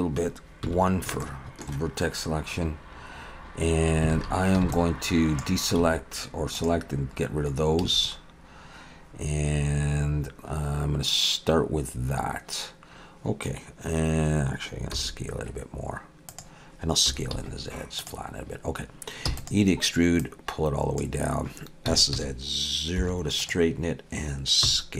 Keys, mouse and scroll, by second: 0.6 1, 1.2 shift+middle click, 2.8-3.7 scroll up 1, 4.1 alt+a, 4.6 b, 5.8 x, 7.8 a, 14.9 s, 17.1 s, 19.3 e, 20.2 click, 21.9 s, 24.6 s.